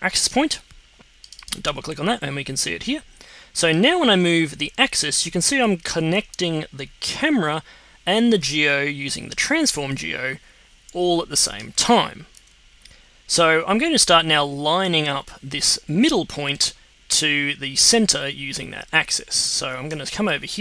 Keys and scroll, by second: 12.3 super+z.